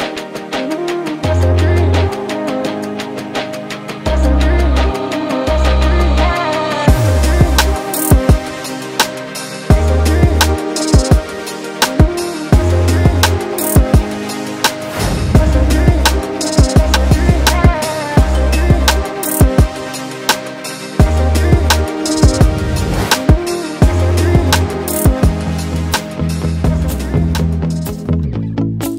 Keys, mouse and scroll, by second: 2.0 click, 2.1 Tab, 3.0 KP_1, 3.6-8.4 shift+middle drag, 8.4 click, 8.8-10.1 middle drag, 10.1 k, 13.2 alt+a, 13.6 KP_1, 14.3-15.6 scroll up 3, 15.6-17.0 drag, 17.2 scroll up 2, 17.5-19.1 shift+middle drag, 19.1 alt+a, 20.0-21.6 drag, 22.4 click, 26.3 click, 27.1 Tab, 27.8 alt+a, 28.5 scroll down 1, 28.6 middle click.